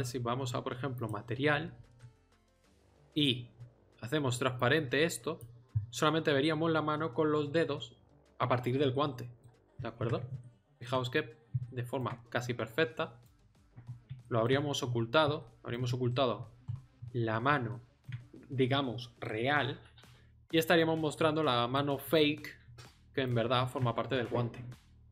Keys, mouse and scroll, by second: 2.0 middle click, 4.6-8.9 middle drag, 11.8 middle click, 12.6 middle click, 20.8 middle click, 22.8-25.1 middle drag.